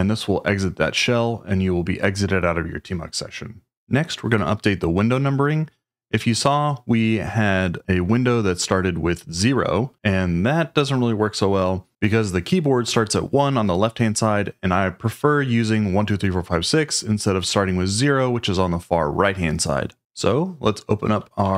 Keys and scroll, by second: 21.2-21.5 typing.